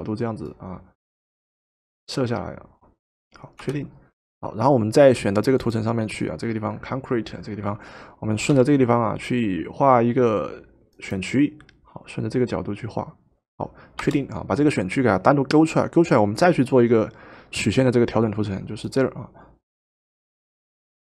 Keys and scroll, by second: 3.6 Return, 8.5 |, 14.0 Return.